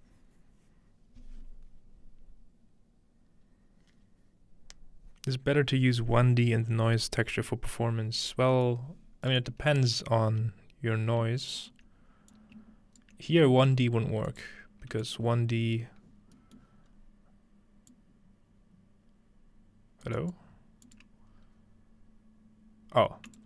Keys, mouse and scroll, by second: 8.2-8.8 scroll down 2, 8.7 middle click, 8.8-9.3 scroll up 2, 9.5 middle click, 9.7 click, 10.3 g, 11.6 ctrl+click, 12.3 ctrl+click, 14.3 click, 15.0 click, 16.2-16.9 scroll down 1, 16.4-17.6 middle drag, 16.9-17.6 scroll up 1, 17.9-21.9 drag, 20.1 right click, 20.4-20.9 right drag, 21.0 right click, 23.3 click.